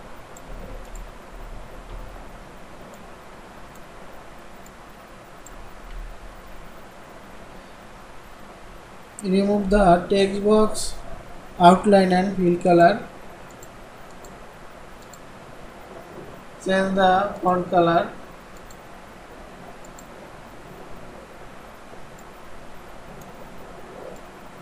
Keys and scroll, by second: 0.7 ctrl+c, 2.0 ctrl+v, 6.0 ctrl+b.